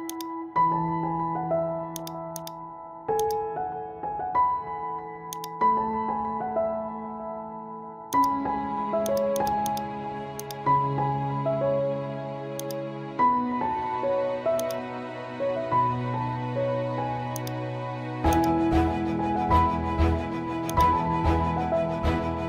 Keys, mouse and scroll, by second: 0.1 click, 1.4 ctrl+e, 1.9 click, 3.5-7.4 drag, 7.4 ctrl+z, 8.1 click, 12.6 click, 14.0 ctrl+t, 14.6-17.4 drag, 17.4-22.1 drag, 22.1 scroll up 1.